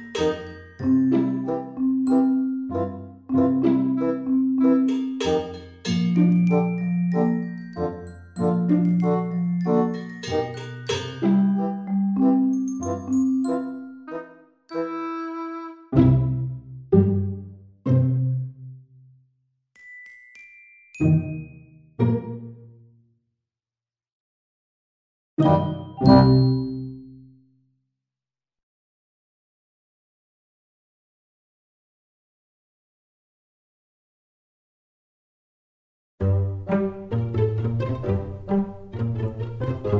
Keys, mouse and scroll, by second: 5.5 click, 7.7 click, 13.9 click, 15.1 click, 27.7 scroll down 3, 28.8 right click, 30.7 scroll down 2, 31.5 click, 31.7 click.